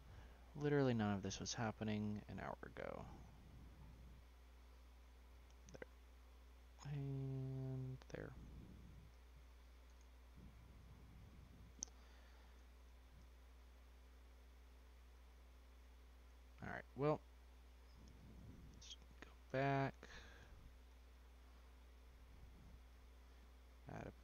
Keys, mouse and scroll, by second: 1.7-3.3 drag, 3.3-6.0 scroll up 7, 6.0-7.3 scroll up 2, 10.8-11.4 scroll down 4, 11.4 ctrl+z, 11.8 ctrl+z, 12.7 ctrl+z, 13.0 ctrl+z, 14.0-15.1 scroll down 4, 15.1 Tab, 15.7-16.9 middle drag, 16.9 ctrl+z, 17.4 ctrl+z, 17.9 ctrl+z, 18.2 ctrl+z, 18.5 ctrl+z, 18.8-20.9 scroll down 1, 20.9 Tab, 21.8-22.8 middle drag, 22.8 click, 24.0 click.